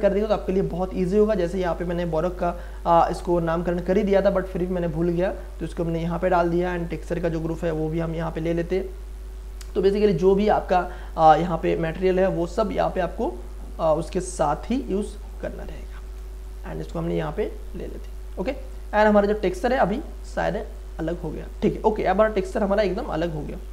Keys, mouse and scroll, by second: 1.8 click, 2.7-5.8 drag, 5.8-6.8 scroll down 1, 6.8 click, 16.4-19.1 drag.